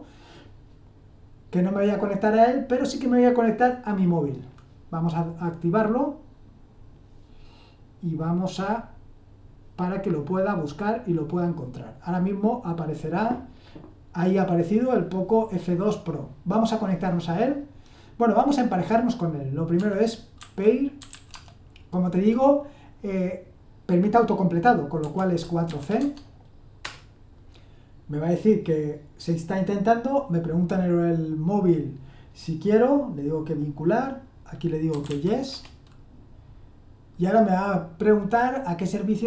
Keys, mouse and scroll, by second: 19.7-21.5 typing, 24.9-25.7 typing, 25.9 Tab, 26.8 Return, 34.7-35.5 typing.